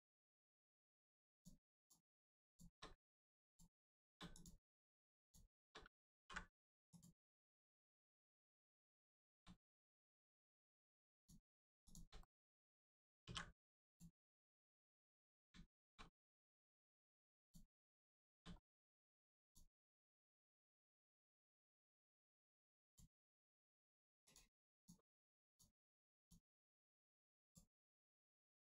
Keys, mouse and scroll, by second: 0.4 middle click, 1.3 click, 2.4 shift+click, 3.4 click, 4.2 click, 5.2 shift+click, 6.1 ctrl+e, 6.8 click, 7.4 middle click, 8.2-8.5 scroll down 1, 8.6 middle click, 8.9 shift+middle click, 9.6 middle click, 11.1 click, 11.8 click, 12.2 middle click, 13.2 ctrl+e, 13.8 click, 15.1 middle click, 15.6 shift+middle click, 16.0 scroll up 1, 16.4 middle click, 17.4 click, 18.5 middle click, 19.4 click, 19.7 middle click, 22.0 middle click, 22.8 click, 24.7 shift+click, 25.4 shift+click, 26.1 shift+click, 26.6 middle click, 27.4 shift+click, 27.7 shift+middle click, 28.5 shift+click.